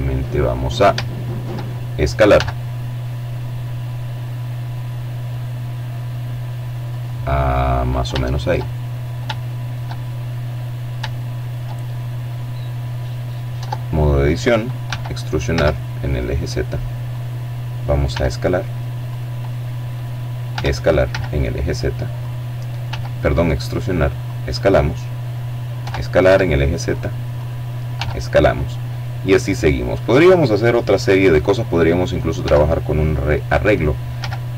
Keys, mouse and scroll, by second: 0.2 s, 4.8 click, 5.8 shift+middle click, 6.6-7.3 shift+scroll up 4, 8.0 shift+middle click, 9.0 shift+middle click, 10.2-11.6 drag, 11.4 Tab, 12.8 e, 13.4 z, 15.0 click, 16.0 s, 17.0 click, 18.4 e, 20.1 click, 20.7 s, 22.1 click, 23.7 e, 24.1 z, 25.2 click, 25.8 s, 27.9 click, 30.3 e, 32.0 z, 33.6 click, 34.2 s.